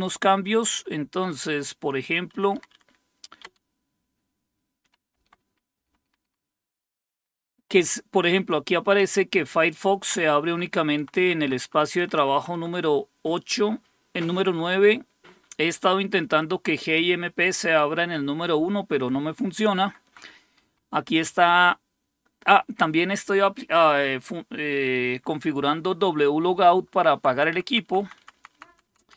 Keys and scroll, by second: 0.0-5.6 typing, 5.9 Up, 6.3 Up, 7.2 Up, 8.4 Down, 8.8-10.4 typing, 11.0 Right, 11.3 Right, 11.7 Right, 11.9 Right, 12.9 Right, 13.1 Right, 13.4 Right, 14.2 Right, 14.5 Right, 15.3-16.8 typing, 19.8 Down, 20.1 Down, 20.6 typing, 27.1 Down, 27.3 Down, 27.5 Down, 27.7 Down, 27.8 Down, 28.0 Down, 28.2 Down, 28.3 Down, 28.5 Down, 28.7 Down, 28.8 Down, 29.0 Down.